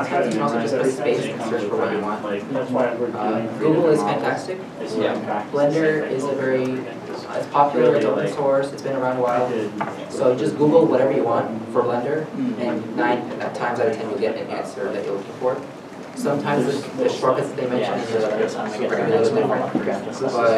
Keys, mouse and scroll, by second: 1.8-2.4 typing, 2.7 shift+Home.